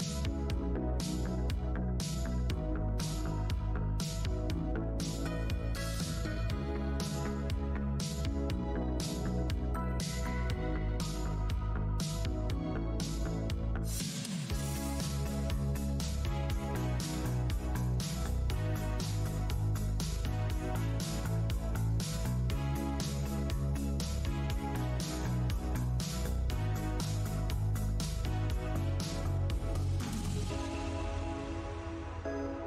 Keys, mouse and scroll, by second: 0.2 space, 1.1 Tab, 1.5-1.9 scroll down 1, 2.9 Tab, 3.0 click, 3.8 Tab, 3.9 alt+click, 4.4 Tab, 4.6 click, 4.8 Tab, 5.4 click, 5.9 alt+click, 6.3-6.8 scroll down 1, 6.8 Tab, 7.4 click, 8.1 Tab, 8.1 alt+t, 8.8 alt+click, 9.1 alt+Tab, 9.2-9.5 alt+scroll up 1, 10.1 alt+w, 11.9 click, 13.1 w, 13.2 alt+Tab, 13.2 alt+click, 13.8 click, 14.0 Tab, 14.1 alt+click, 14.6 right click, 17.7 click, 19.5 click, 19.8 alt+click, 20.2 Tab, 20.9 alt+click, 21.3-22.7 typing, 22.9 scroll, 24.2 Tab, 25.3 click, 26.2 scroll up 1, 27.0 shift+d, 27.8 e, 27.9 click, 28.9 Tab, 29.1 alt+click, 29.4 alt+w, 29.9 shift+Tab, 31.6 shift+w, 32.2 click, 32.3 Tab, 32.3 space.